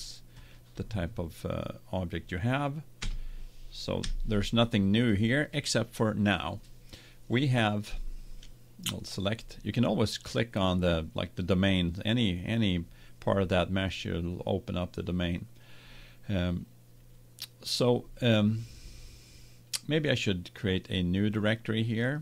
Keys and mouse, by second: 2.3 middle click, 3.0 Tab, 4.0 KP_1, 9.9-12.1 drag.